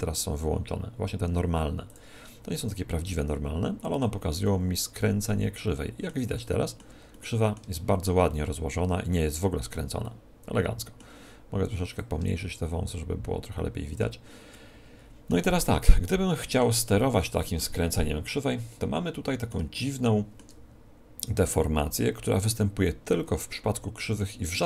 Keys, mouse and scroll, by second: 1.8-3.7 drag, 3.5-6.3 middle drag, 6.4-11.9 middle drag, 11.9-13.8 drag, 14.5-21.5 middle drag.